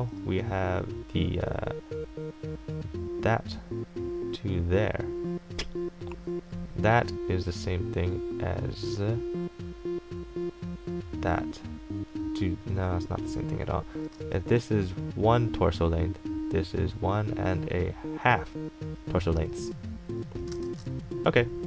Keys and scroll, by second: 0.0 x, 14.3 ctrl+z, 20.7 ctrl+shift+z.